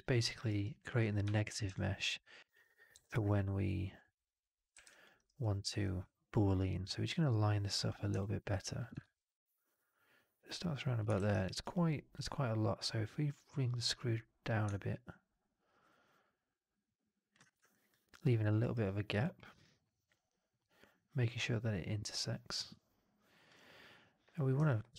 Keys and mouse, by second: 0.0 alt+click, 0.3 alt+right click, 0.6 alt+click, 1.6 alt+click, 2.8 r, 4.1 middle click, 4.6 w, 5.0 alt+right click, 5.3 alt+click, 8.1 alt+middle click, 8.9 shift+x, 11.0 shift+x, 11.3 alt+right drag, 11.6-12.0 drag, 13.9-17.3 drag, 17.6 alt+drag, 18.0-18.3 alt+right drag, 18.5 alt+right drag, 18.7-19.1 alt+drag, 19.2 alt+middle drag, 19.5-23.3 alt+drag, 24.5 1.